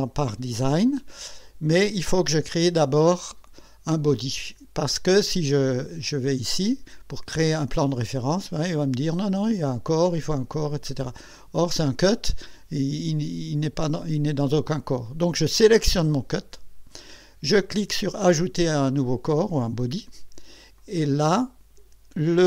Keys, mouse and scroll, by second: 1.5 click, 7.8 click, 10.8 click, 16.2 click, 20.8 click.